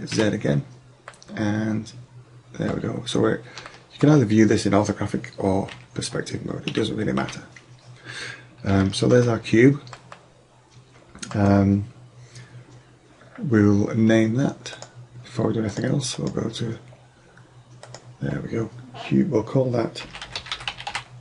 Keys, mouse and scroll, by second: 0.2 z, 5.6 KP_5, 6.7 KP_5, 7.2 KP_5, 14.9-17.9 drag.